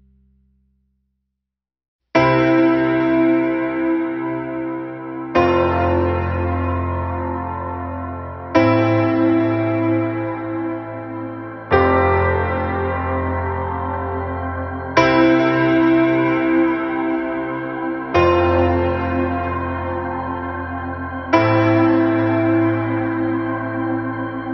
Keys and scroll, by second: 8.1 ctrl+=, 8.9 space, 10.0 space, 10.6 space, 19.6 ctrl+-, 23.1 ctrl+-.